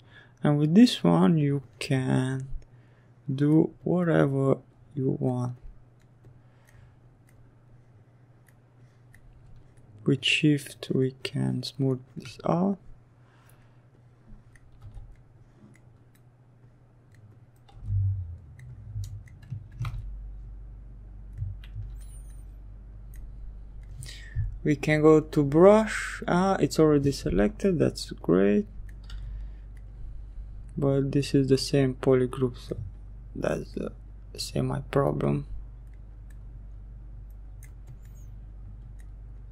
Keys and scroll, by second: 13.2 s, 16.2 s, 18.4 ctrl+z, 27.6 s.